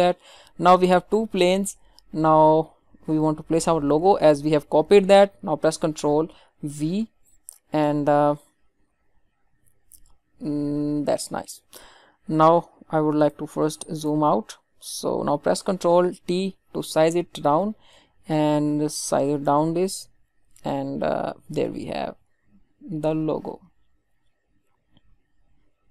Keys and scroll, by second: 6.6 ctrl+v, 16.2 ctrl+t.